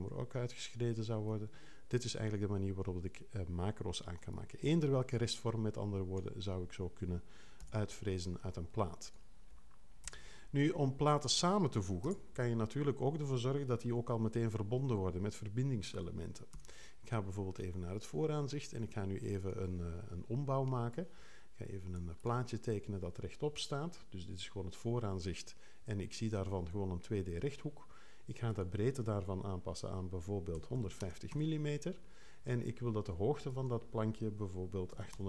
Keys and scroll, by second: 7.6 BackSpace, 10.1 BackSpace, 12.0 BackSpace, 16.5 2, 30.3-31.5 typing, 34.9 8.